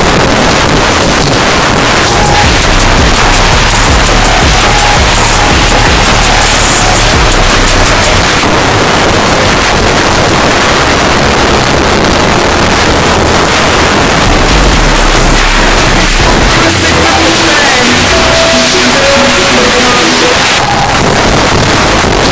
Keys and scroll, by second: 8.2 Page_Down, 20.3 Page_Down.